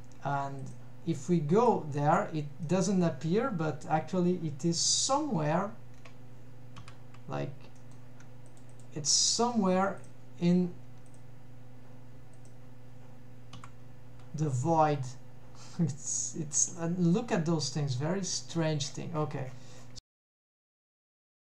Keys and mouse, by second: 0.6 click, 1.9 click, 2.7 middle drag, 4.8 KP_Decimal, 6.8 KP_Decimal, 7.8 middle drag, 8.5 click, 8.8-10.1 drag, 11.1 click, 12.4 click, 13.6 KP_Decimal, 14.9-16.2 middle drag, 16.8-18.1 middle drag, 20.8 middle click, 21.2 middle drag.